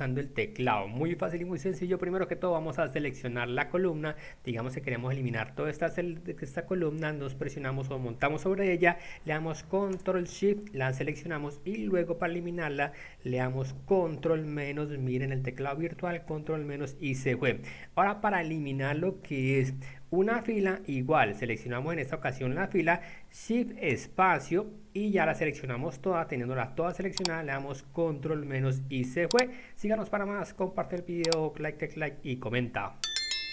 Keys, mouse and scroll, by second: 1.8 click, 3.0 click, 4.7 click, 6.8 click, 9.9 ctrl+space, 16.4 ctrl+-, 19.5 click, 23.9 shift+space, 28.3 ctrl+-.